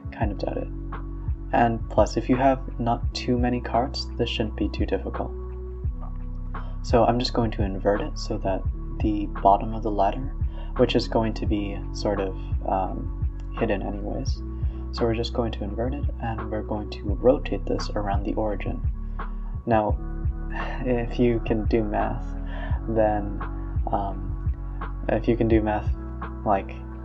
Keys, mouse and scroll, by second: 0.4 Tab, 2.1 click, 2.6 Tab, 2.9 Tab, 4.3 click, 4.8-5.4 middle drag, 5.4 scroll down 1, 5.5-6.9 middle drag, 6.9 scroll down 1, 7.2 s, 8.4 KP_Decimal, 8.7 KP_1, 9.2 KP_3, 9.7 scroll down 3, 9.9-10.6 middle drag, 10.6-11.1 scroll up 6, 11.1-11.6 middle drag, 11.6 scroll down 1, 11.9 KP_1, 12.5 KP_3, 12.8-13.4 scroll down 1, 13.4 alt+d, 13.6 r, 23.7 r, 26.7 r.